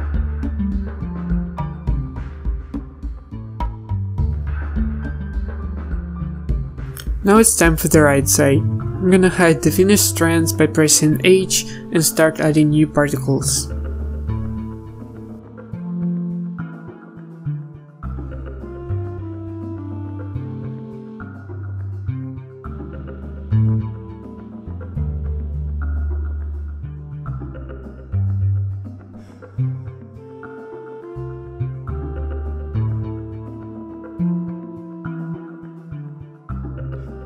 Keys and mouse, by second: 0.0 KP_1, 0.8 middle click, 0.8 KP_1, 2.0-3.4 typing, 3.8 ctrl+s, 5.9 ctrl+z, 6.8 a, 7.7 ctrl+z, 7.8 ctrl+s, 8.4 a, 11.0 h, 16.6-20.0 drag, 20.0 ctrl+z, 24.3-26.3 typing, 27.5 w, 28.4 a, 31.2 g, 31.9 g, 33.6 z, 34.0 KP_1, 34.5 z, 36.2 KP_1.